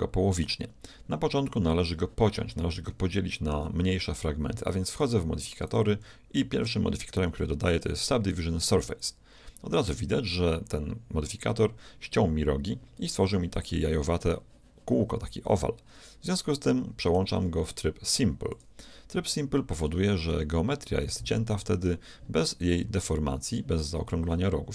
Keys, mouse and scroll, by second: 0.4 Tab, 3.0-5.0 middle drag, 5.0-7.6 drag, 16.3-18.2 middle drag, 18.6-20.4 drag, 19.2 z, 20.4-24.4 middle drag.